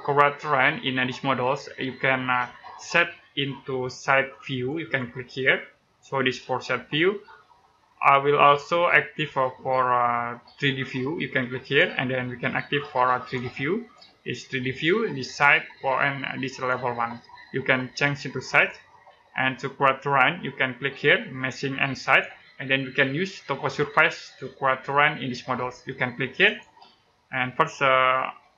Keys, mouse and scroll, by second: 0.8-1.4 scroll down 1, 4.4 click, 11.5 click, 21.9 click, 26.3 click.